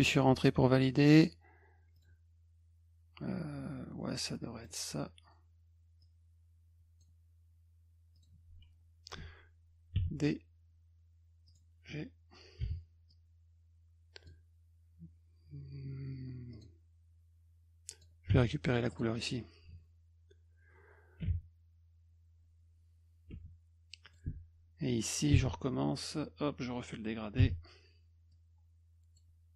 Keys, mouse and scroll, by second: 1.1 click, 2.0 click, 4.3 click, 6.0 click, 8.1 click, 11.5 click, 12.7 g, 13.1-14.3 drag, 16.5 click, 17.9 click, 18.3 d, 18.9 click, 19.7 F1, 24.0 click, 25.3 d, 26.0 click, 27.4 g, 28.3 click.